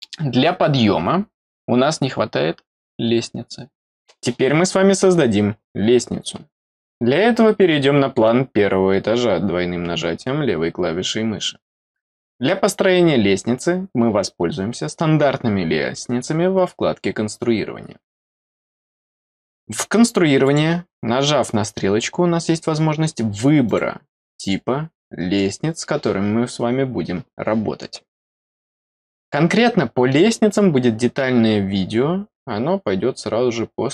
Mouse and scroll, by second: 20.4 click, 23.6 click, 24.3 click, 25.1 scroll down 2, 25.4 middle click.